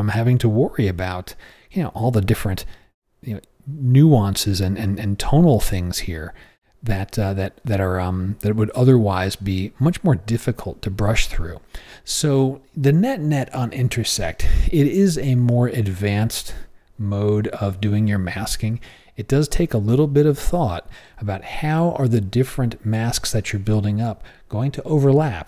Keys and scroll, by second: 1.9 o, 6.3 o, 11.1 o.